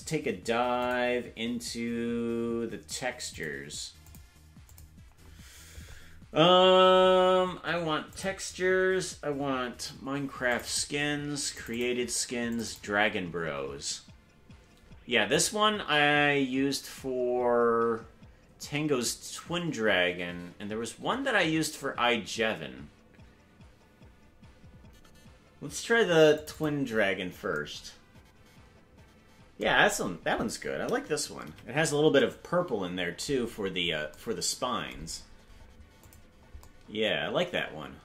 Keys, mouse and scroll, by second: 0.8 click, 3.3 click, 4.6 click, 31.4 KP_Decimal, 33.4-34.1 scroll up 7, 36.0 click.